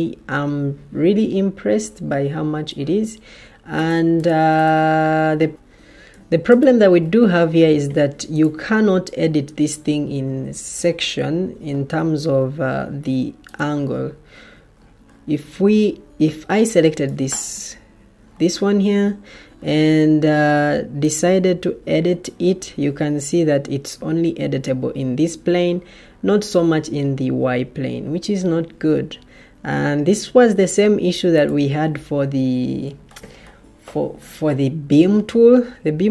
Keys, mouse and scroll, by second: 5.5 Escape, 11.8 Escape, 16.1 Escape.